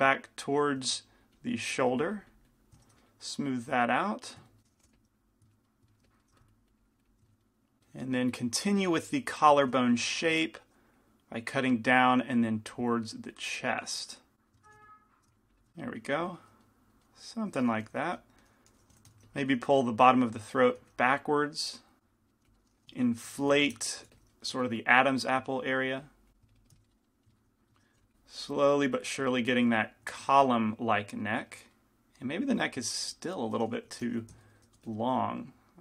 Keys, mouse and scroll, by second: 2.4 click, 4.0 click, 4.9 g, 4.9 f, 5.4 click, 6.1 f, 6.4 f, 6.6-8.0 drag, 9.0 shift+c, 9.0 f, 10.2 f, 11.1-14.5 drag, 14.7 f, 15.4 click, 16.3-18.2 drag, 16.8 middle click, 18.2 g, 18.2 f, 19.3 f, 20.1-22.7 drag, 21.0 f, 22.3 middle click, 22.5-24.7 typing, 25.1-26.9 drag, 27.0 click, 28.0 f, 30.7 click, 30.7-34.5 middle drag, 34.2 g, 34.2 f, 35.0 f, 35.7-35.8 drag, 35.7-35.8 middle drag.